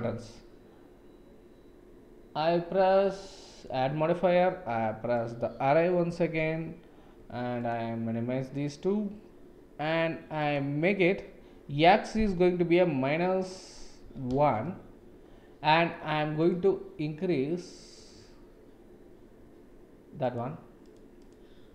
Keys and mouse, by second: 7.5 drag, 8.5 click, 10.3-15.2 drag, 16.6 click, 18.1 click, 20.9 click, 21.2 click.